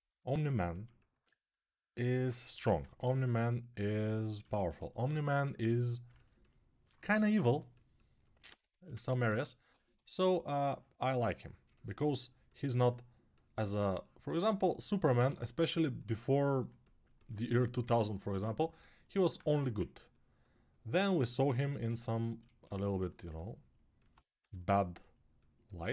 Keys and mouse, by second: 2.3 g, 14.9 g, 16.5-24.2 alt+right drag, 17.2 1, 18.1 1, 19.2 1, 24.2 g.